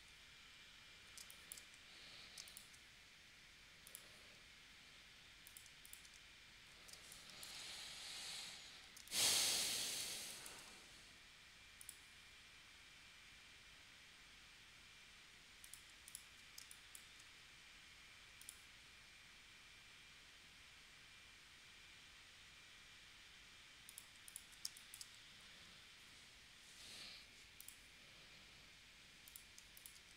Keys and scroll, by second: 1.2 space, 2.4 space, 6.9 space, 9.0 space, 16.6 space, 24.6 space.